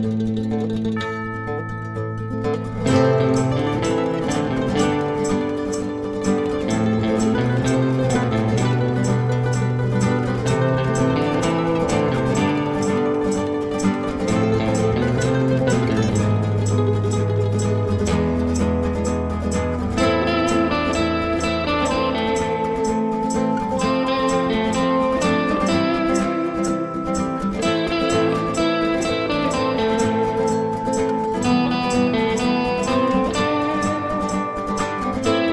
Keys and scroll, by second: 19.4 Page_Down, 21.0-22.2 typing, 33.2-33.9 typing.